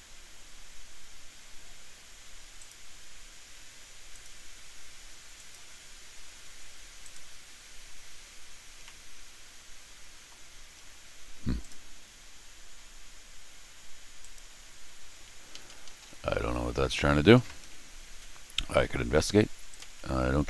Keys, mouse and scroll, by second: 1.0 middle click, 1.0 scroll down 2, 2.5 click, 4.1 click, 5.3 click, 7.0 click, 8.4 scroll up 1, 8.8-10.1 middle drag, 10.8 scroll down 1, 11.6 click, 14.2 click, 15.5 Escape, 15.6 Escape, 15.8 Escape, 16.0 Escape, 17.6 scroll down 2, 19.7 click, 19.8 f.